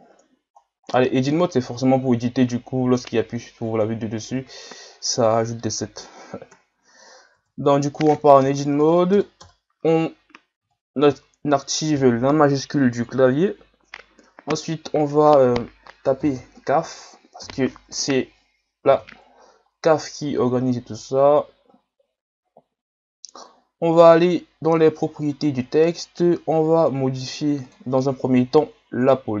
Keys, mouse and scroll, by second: 0.6 scroll down 1, 0.9-3.2 middle drag, 3.2 Tab, 4.3 KP_7, 5.3-6.5 scroll up 1, 6.5 KP_Divide, 7.3 Tab, 8.4 BackSpace, 8.9 BackSpace, 9.1 BackSpace, 9.4 BackSpace, 16.2 c, 16.3 a, 17.4 f, 18.9 Tab, 19.7 scroll down 3, 20.7 scroll up 2, 23.4-25.0 drag, 25.1 scroll down 6, 27.6-29.4 drag.